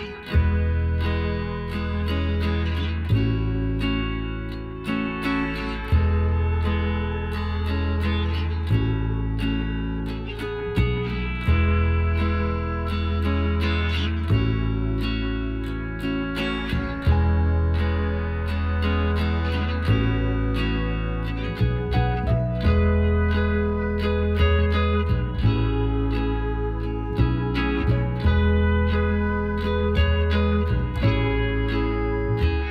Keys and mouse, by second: 1.8-4.8 right drag, 2.8 b, 4.9 s, 8.4 g, 11.3 z, 12.1 Tab, 13.5 a, 16.6 middle click, 17.1-18.7 middle drag, 19.4-20.8 middle drag, 20.4-22.0 right drag, 21.9-23.7 drag, 22.8 right click, 22.9 middle click, 23.7 middle click, 24.0 ctrl+z, 24.7 a, 25.0-31.1 middle drag, 29.4-31.3 right drag, 29.6 Tab, 31.3 middle click.